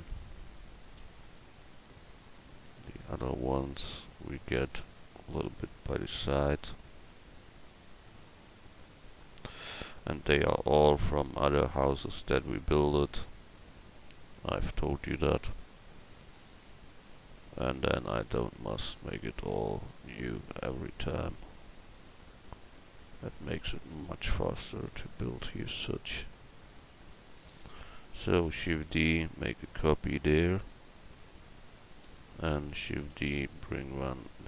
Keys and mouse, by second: 1.0 x, 3.2 l, 4.1 l, 7.1 s, 9.6 a, 10.9 l, 11.7-13.1 drag, 15.2 shift+d, 20.7 s, 22.9 click, 27.3-28.5 right drag, 28.5 shift+d, 29.2-31.4 drag, 33.0 shift+d.